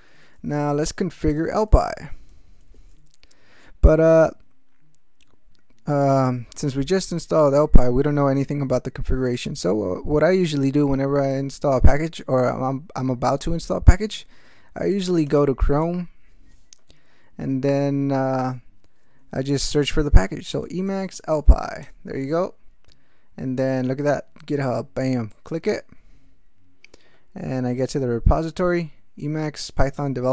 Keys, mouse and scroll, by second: 0.0-2.8 typing, 16.1 Return, 18.4 click, 20.2-21.8 typing, 25.3 click, 29.8-30.3 drag.